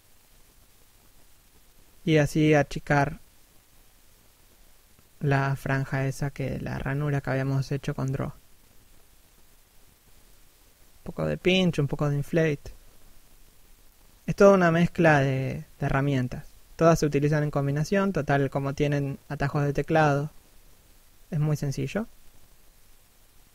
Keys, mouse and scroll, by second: 0.6 click, 1.5 shift+middle click, 1.9 click, 2.5 click, 2.8 scroll down 1, 3.0 middle click, 4.5 scroll up 1, 4.9 p, 5.1 scroll down 1, 5.4 click, 7.4 shift+f, 8.0 click, 11.8 click, 12.8 click, 14.8 scroll down 1, 15.0 middle click, 16.8 scroll up 1, 17.1 middle click, 17.6 scroll up 1, 17.7 scroll down 1, 17.9 middle click, 18.8 f, 19.1 click, 20.9 click, 22.4 f, 22.9 right click, 23.1 scroll up 1, 23.3 middle click.